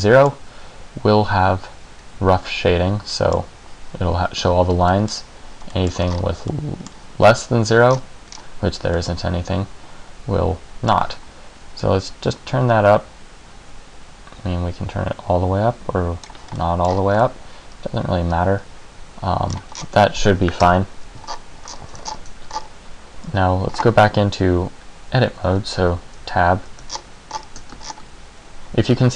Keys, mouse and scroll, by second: 3.3 middle click, 5.0 middle click, 6.2 middle click, 6.2-7.2 scroll up 4, 6.6 middle click, 8.0-8.7 scroll down 5, 9.1 middle click, 12.0 click, 16.7 middle click, 17.0-17.4 scroll up 3, 17.4 middle click, 19.6-20.8 scroll down 8, 20.8 KP_1, 21.4-21.8 scroll up 5, 21.8-22.1 scroll down 2, 22.3-22.8 shift+scroll up 4, 23.4 x, 25.6 Tab, 26.3 z, 27.0-27.4 shift+scroll down 6, 27.4 shift+scroll up 3, 27.9 ctrl+scroll down 1, 28.0 ctrl+scroll down 5.